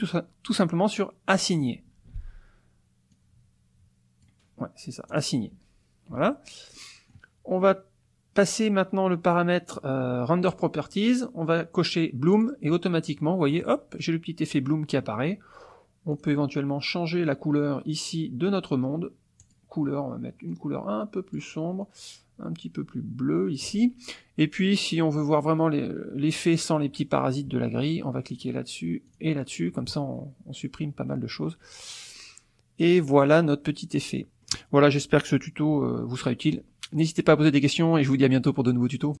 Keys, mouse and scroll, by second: 1.4 click, 2.2 ctrl+z, 3.2-4.6 drag, 5.1 click, 6.2 Tab, 6.8 click, 6.8 middle click, 6.9 click, 10.5 click, 12.4 click, 13.1 click, 13.4-15.2 middle drag, 16.1 click, 19.4 click, 20.6 click, 21.8-23.8 drag, 24.4-25.6 middle drag, 28.3 click, 29.1 click, 30.7-31.1 scroll down 1, 31.1 middle click, 31.1-34.4 drag, 34.4-39.2 scroll up 1.